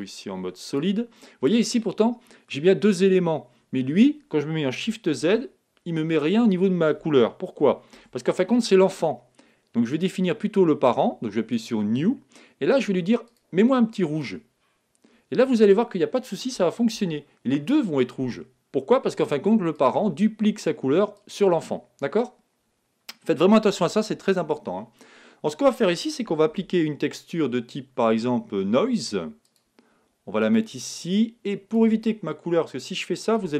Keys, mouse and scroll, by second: 1.7-3.4 middle drag, 5.1 shift+z, 7.9 shift+z, 9.9-11.5 right drag, 11.5-15.2 drag, 16.9 shift+z, 19.7-23.1 drag, 26.4 shift+a, 31.1-32.8 drag, 33.3-33.5 drag.